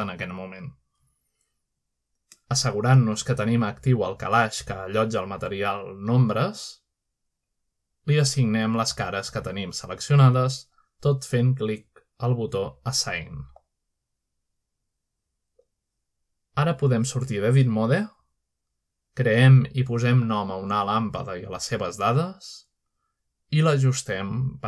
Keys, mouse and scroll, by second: 0.0 scroll down 1, 0.5 shift+middle click, 0.8-1.5 shift+scroll down 2, 1.8 shift+middle click, 2.5 shift+middle click, 4.2-4.8 scroll up 1, 4.8-5.2 scroll down 1, 5.4 z, 6.3 middle click, 6.6 middle click, 7.7-8.3 middle drag, 8.3-10.0 drag, 13.6 click, 14.7 scroll down 1, 15.1 shift+middle click, 15.4 scroll down 1, 16.1 shift+middle click, 16.6 shift+middle click, 17.9 middle click, 18.7 Tab, 19.7 middle click, 20.7-21.0 shift+middle drag, 21.7-22.3 shift+middle drag, 21.9-22.6 scroll down 1, 22.6-23.5 shift+middle drag, 22.9 a.